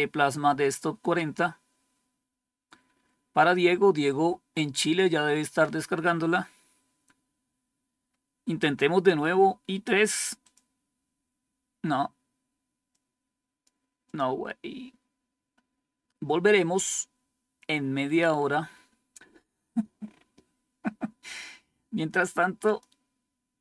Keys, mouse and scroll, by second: 4.7 click, 5.2 click, 6.1-9.5 scroll down 4, 10.3 click, 12.8 click, 14.0 click, 22.5 click.